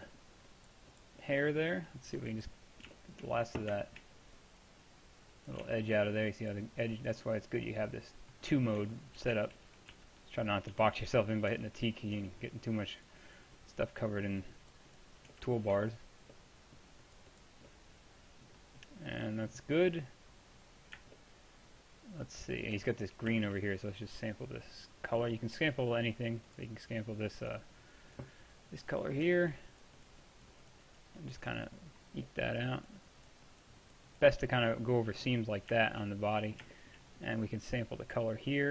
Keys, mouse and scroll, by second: 0.5-4.2 drag, 4.4-5.5 drag, 9.1-10.8 middle drag, 10.0-12.2 typing, 12.9-16.2 drag, 16.2-19.3 middle drag, 29.8-31.8 drag, 32.3-34.7 drag, 35.0-35.7 drag, 36.0-38.1 middle drag, 38.1-38.7 drag.